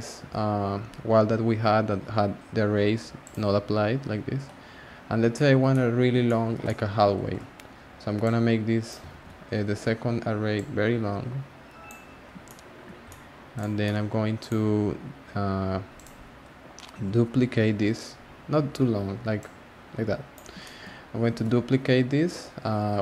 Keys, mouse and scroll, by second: 3.2 click, 5.3-8.2 shift+middle drag, 8.2 click, 9.1 z, 9.7-10.5 scroll down 3, 10.5-12.4 drag, 12.4-13.5 shift+middle drag, 13.5 click, 13.8-14.4 middle drag, 14.4 click, 15.9 click, 16.5-17.3 scroll down 1, 17.3-19.0 scroll down 2, 19.4-20.6 drag, 20.6 shift+middle drag, 20.9 scroll up 2, 21.4 shift+d.